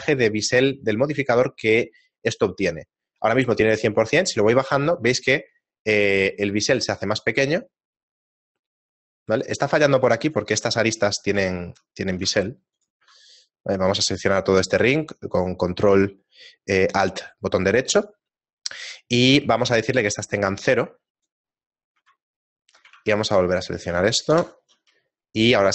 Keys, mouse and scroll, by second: 4.0 click, 10.2 right click, 12.2 ctrl+Tab, 13.3 ctrl+alt+right click, 20.2 click, 22.9 ctrl+Tab, 23.7 right click, 24.3 ctrl+KP_Add.